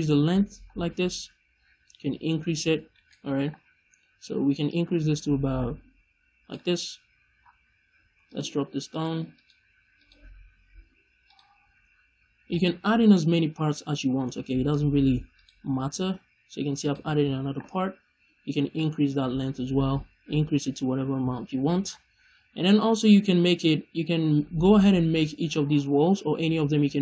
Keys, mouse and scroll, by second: 3.0 right click, 4.6-8.3 drag, 7.3-7.8 scroll up 1, 8.8 click, 9.2 click, 9.9 click, 11.2 drag, 12.4 click, 13.0-13.8 scroll up 1, 15.2 click, 15.7-16.7 scroll down 1, 16.7-17.7 drag, 17.7-18.1 scroll down 1, 18.7-20.9 drag, 22.7 click.